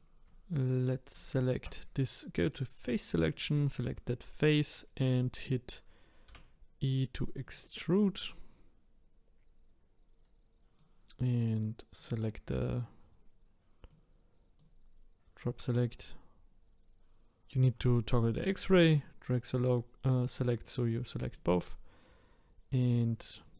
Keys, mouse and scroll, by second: 0.7 shift+click, 2.4 click, 3.3 click, 4.3 click, 5.0-6.3 scroll down 3, 6.3 e, 7.9 click, 12.0 click, 13.9 click, 18.9 click, 20.2-23.4 middle drag, 23.4 click.